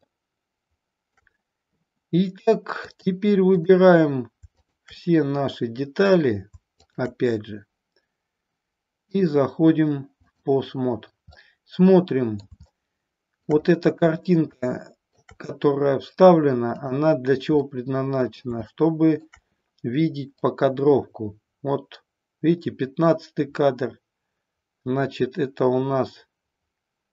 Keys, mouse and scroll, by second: 2.9-3.6 drag, 4.6 shift+click, 9.0-10.4 drag, 11.4 middle click, 12.8-13.4 shift+middle drag, 14.5-15.2 shift+middle drag, 16.7 click, 17.6 middle click, 18.7-19.2 shift+middle drag, 20.3-27.1 drag.